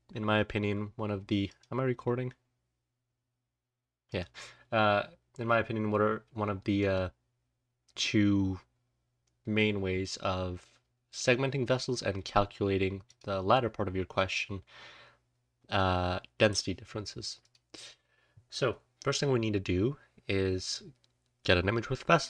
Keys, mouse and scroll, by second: 0.1-0.9 scroll down 1, 0.9-1.4 scroll down 1, 6.7 click, 21.5-22.2 scroll up 1, 21.9-22.2 drag.